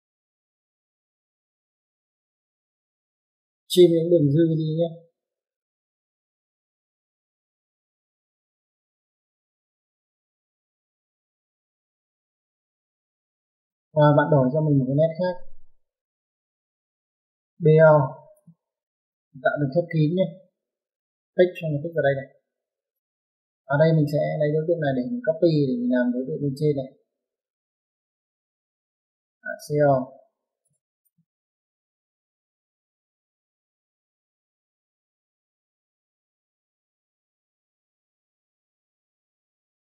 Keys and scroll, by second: 10.1 space, 14.5-15.5 typing, 19.3 space, 27.2-28.0 typing.